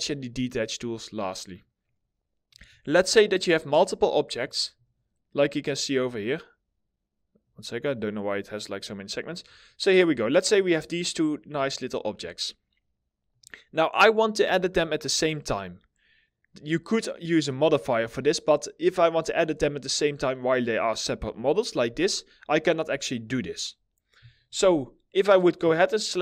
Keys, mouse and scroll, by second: 2.4 alt+middle click, 4.3 right click, 6.9 right click, 8.8 scroll up 1, 9.1 alt+middle click, 10.7 middle click, 19.0-19.4 scroll up 1, 19.4-21.4 scroll down 1.